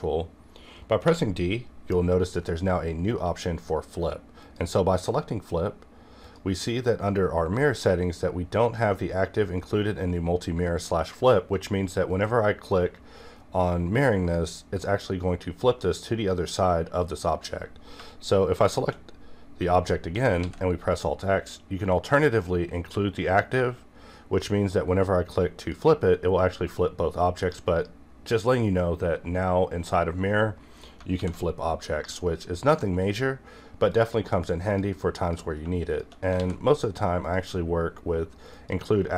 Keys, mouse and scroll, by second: 1.0 d, 4.4 click, 14.3 click, 18.0 shift+Num_Lock, 18.0 click, 18.6 shift+click, 20.3 alt+x, 23.5 click, 25.6 click, 31.0 click, 31.1 alt+x, 33.0 click, 35.8 shift+click, 36.3 alt+x, 37.2 click.